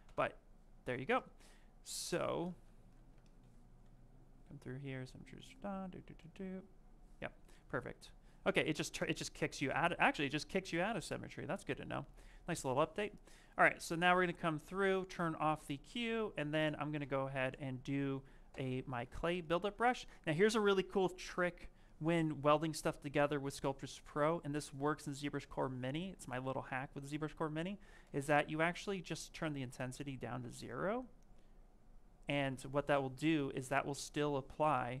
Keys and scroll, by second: 1.3 s, 3.3 w, 14.2 s, 16.0 s, 28.0 space.